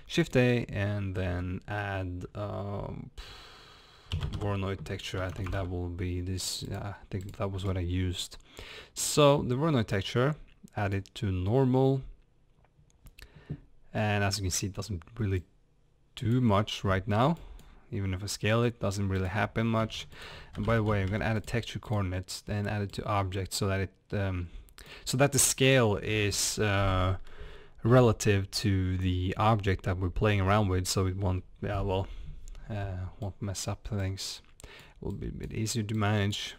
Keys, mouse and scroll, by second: 11.0 click, 15.4-24.9 drag, 33.2 click, 35.1 click, 35.9 click.